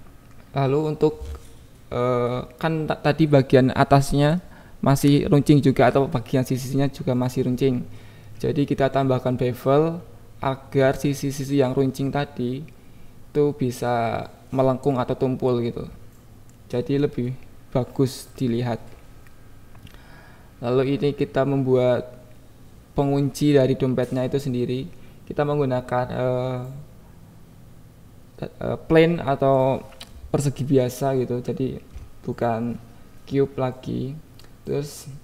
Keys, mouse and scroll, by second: 0.6-2.1 shift+drag, 2.9-4.0 shift+drag, 5.0 KP_3, 5.4 KP_1, 11.3 click, 11.5 Tab, 11.9 alt+z, 12.1 click, 12.8 g, 13.1 x, 13.5 click, 13.6 Tab, 14.0 click, 14.5 click, 14.8 KP_1, 16.3 click, 17.3 KP_7, 17.3 shift+a, 18.7-20.5 typing, 19.8 Return, 21.6 click, 21.6 y, 21.9 KP_1, 22.4 alt+z, 22.9 s, 23.7 click, 24.1 g, 24.2 x, 24.8 click, 25.3 Tab, 25.7 click, 26.2 click, 26.6 g, 26.9 x, 27.6 click, 27.8 KP_7, 28.6 click, 29.9 g, 30.0 y, 31.3 ctrl+z, 31.6 Tab, 32.1 g, 32.3 y, 33.2 click, 33.5 Tab, 33.7 click, 34.2 alt+z, 34.2 alt+x, 34.4 alt+z, 34.6 click, 35.0 e.